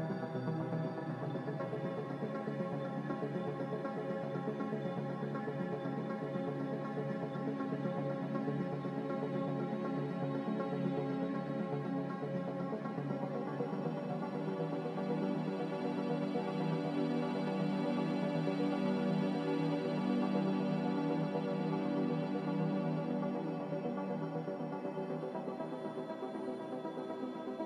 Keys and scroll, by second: 9.1 q, 12.7 ctrl+j, 16.2 q, 16.9 ctrl+k.